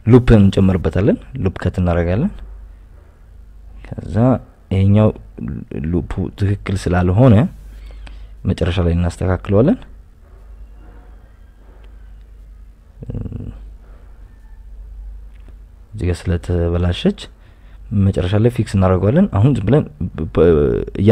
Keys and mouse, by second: 0.2 click, 0.6 right click, 0.7 g, 0.8 y, 1.5 click, 2.2 ctrl+r, 2.9 Escape, 3.4 right click, 3.6 g, 3.7 y, 3.9 x, 4.6 click, 5.5 ctrl+r, 9.1 ctrl+r, 9.6 Escape, 10.0 click, 10.4 click, 10.9 g, 11.0 g, 11.6 click, 11.8 click, 12.5-14.7 typing, 13.4 right click, 14.9 click, 16.0-17.0 right drag, 17.0 g, 17.2 g, 18.9 g, 19.1 g, 19.5 g, 20.6 right click, 20.8 g.